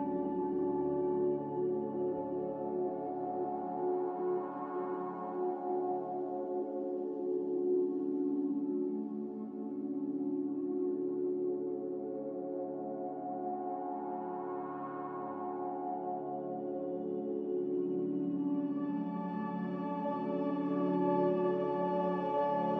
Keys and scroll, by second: 0.0-1.1 typing, 2.8-3.6 typing, 8.2-9.0 typing, 10.7-11.4 typing, 11.5 Return, 15.1 F9, 15.7 s, 17.0-19.0 typing, 20.4 typing, 20.7 Return.